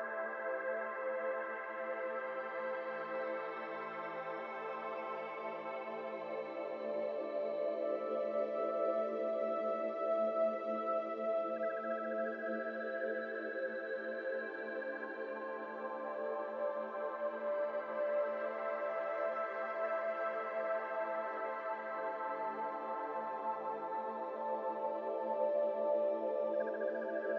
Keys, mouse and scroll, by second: 0.1 alt+z, 0.2 scroll down 1, 0.3-2.1 middle drag, 2.1 Tab, 2.2 scroll down 1, 2.3 middle click, 2.8-5.5 typing, 2.9 click, 6.8 g, 8.0 middle click, 8.5 a, 8.6-9.8 middle drag, 9.8 3, 10.1 middle click, 10.4 click, 11.8 click, 12.7-16.7 drag, 17.4-18.7 drag, 21.6 click, 22.8-24.9 drag, 26.6-27.3 shift+middle drag.